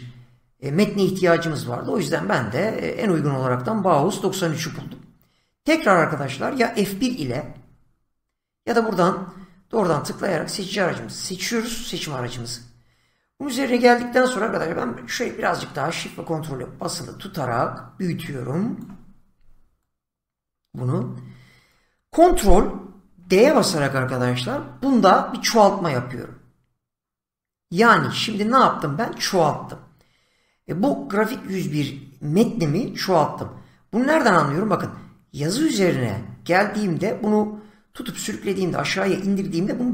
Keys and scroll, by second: 7.3 F1, 23.0 ctrl+d.